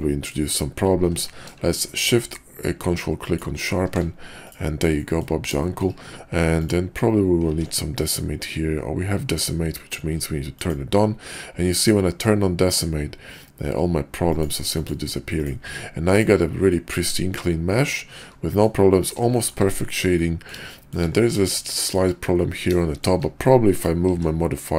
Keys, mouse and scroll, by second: 0.9 q, 4.4 click, 5.0 middle click, 5.5 shift+middle click, 7.5 ctrl+`, 16.0 click, 16.7-18.6 middle drag, 19.4 shift+middle click, 20.1-20.5 middle drag, 20.7 shift+middle drag, 21.2 middle click, 21.5-22.0 shift+middle drag, 22.8 shift+drag, 23.8 click, 24.1 q.